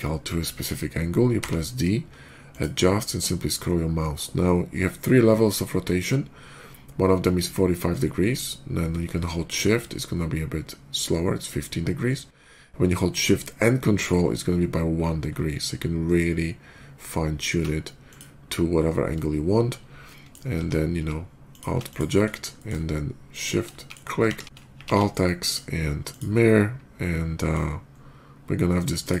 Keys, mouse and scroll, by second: 1.2 d, 2.3 click, 4.0 middle click, 4.0 scroll up 1, 6.2 middle click, 6.2 scroll up 1, 7.8 middle click, 7.8 scroll down 1, 9.3 shift+middle click, 9.3-9.7 shift+scroll down 2, 9.6 shift+middle click, 10.3 shift+middle click, 10.3 shift+scroll down 1, 10.9 shift+middle click, 10.9 shift+scroll down 1, 11.8 shift+middle click, 11.8 shift+scroll down 1, 14.0 ctrl+shift+middle click, 14.8 ctrl+shift+middle click, 15.5 ctrl+shift+middle click, 16.1 ctrl+shift+middle click, 16.5 ctrl+shift+middle click, 17.9 ctrl+shift+click, 18.6 ctrl+shift+middle click, 19.2 ctrl+shift+middle click, 19.9 ctrl+shift+middle drag, 21.3 alt+d, 21.3 click, 21.7 click, 22.4 alt+middle click, 23.2 shift+click, 23.6 shift+middle drag, 24.1 alt+x, 24.7 alt+x, 25.1 middle click, 25.9 click, 26.3-27.3 middle drag, 27.6 middle click, 27.7 middle click, 28.8 click.